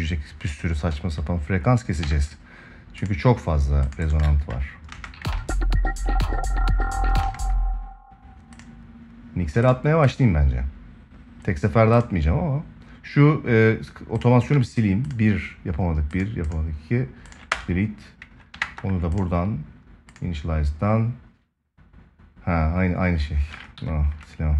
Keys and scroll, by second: 1.8 ctrl+s, 4.7 space, 5.1 ctrl+s, 7.0 space, 18.3 ctrl+s, 23.5 Escape.